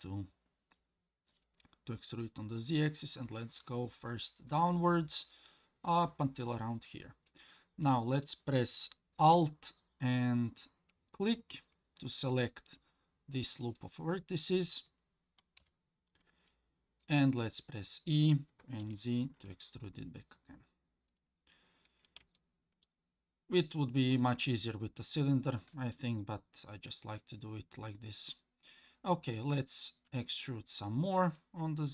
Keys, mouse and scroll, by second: 11.1 alt+click, 12.7-14.6 middle drag, 15.6 KP_1, 17.5 e, 22.4 shift+middle click, 30.1 e.